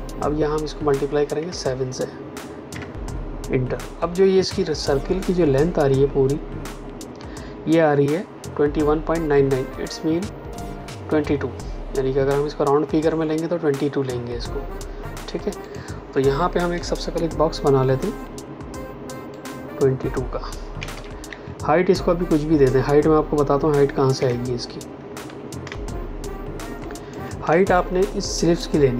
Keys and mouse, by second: 1.3 KP_7, 2.6 KP_Enter, 15.6 click, 16.7 m, 19.3 click, 20.7 KP_2, 21.2 Tab, 24.1 KP_Enter, 25.2 v, 25.6 space, 25.8 click, 26.1 space, 27.6 click, 27.9 space.